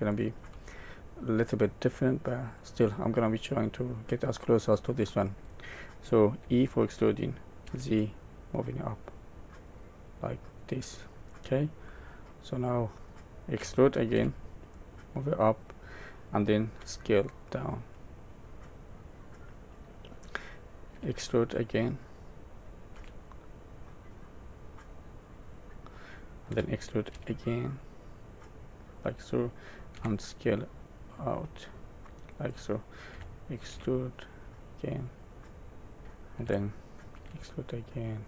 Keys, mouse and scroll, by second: 6.5 e, 11.8 middle click, 13.6 e, 16.9 s, 18.8 middle click, 20.9 e, 26.5 e, 29.9 s, 33.1 e, 36.3 e.